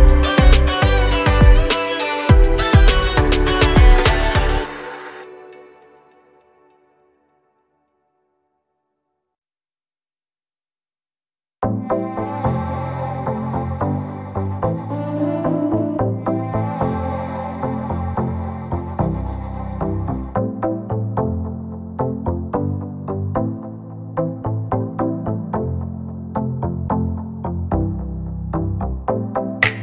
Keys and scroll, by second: 0.4-3.1 typing, 3.3 Return, 4.4 5, 4.6 Return, 4.9 space, 5.2 Escape, 7.5 l, 9.2 space, 9.7 p, 10.4 2, 10.6 Return, 11.6 5, 11.8 Return, 13.2 space, 14.1 l, 16.2 ctrl+z, 17.6-19.7 typing, 19.8 Escape, 24.0-26.2 typing, 27.6 space, 27.7 Escape, 29.4 l.